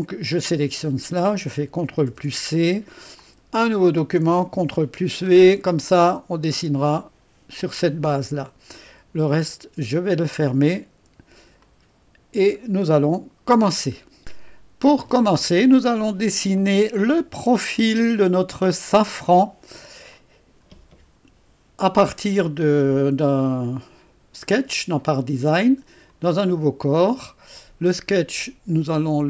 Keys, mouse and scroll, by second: 0.6 click, 0.9 click, 2.1 ctrl+c, 3.2 click, 4.5 ctrl+v, 5.3-5.9 scroll down 1, 5.9-7.0 drag, 10.7 click, 11.7 click, 12.5-13.0 scroll up 2, 14.3 click, 15.3-16.4 drag, 17.3 typing, 17.9-23.5 drag, 26.1 click.